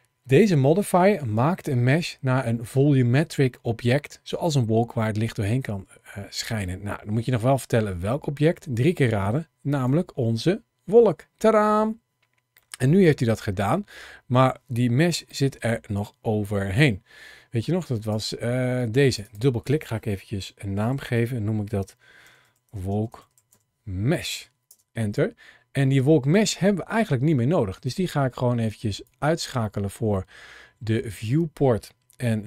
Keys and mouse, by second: 12.5-13.3 middle drag, 15.1 shift+middle click, 19.2-24.5 drag, 27.7 click, 29.4-32.4 middle drag.